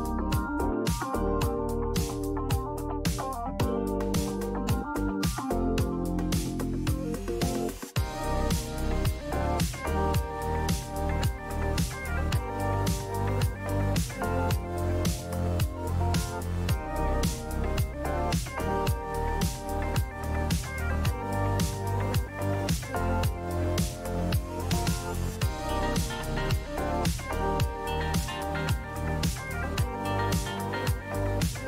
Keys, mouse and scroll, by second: 0.7 click, 1.3-2.8 drag, 2.8-3.5 Down, 3.7 Down, 4.6 Down, 4.6 Down, 4.7 Down, 4.9 Down, 6.6 Up, 10.1 Up, 10.2 click, 10.9 click, 13.3 click, 14.5 click, 15.9 click, 17.1 alt+Delete, 18.4 ctrl+d, 20.1 click, 20.7 click, 21.7 click, 21.8 click, 23.4 click, 27.1 click, 29.1 click, 31.0 click, 31.2-31.6 typing.